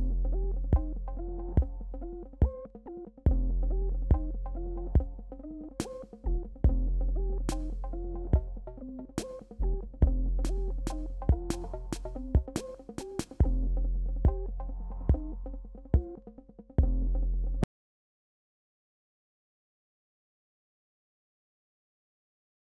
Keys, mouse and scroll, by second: 0.5 alt+scroll down 1, 1.5 Tab, 8.8 Tab, 10.6 ctrl+-, 14.7 click.